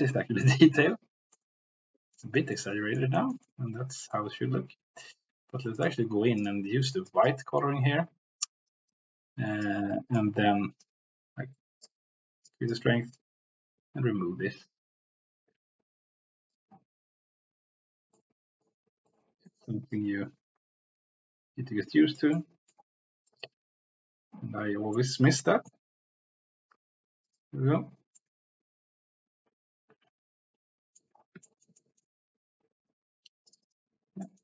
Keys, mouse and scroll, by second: 0.5 middle click, 1.3 middle click, 2.5 middle click, 3.2 shift+middle click, 3.6 middle click, 6.3 click, 9.6 click, 10.8-11.9 drag, 12.5 click, 13.2-18.5 drag, 19.1 middle click, 19.9-22.2 drag, 22.5 middle click, 25.1 middle click, 28.2-31.1 middle drag, 31.6 shift+middle click, 33.5 click, 34.2 middle click.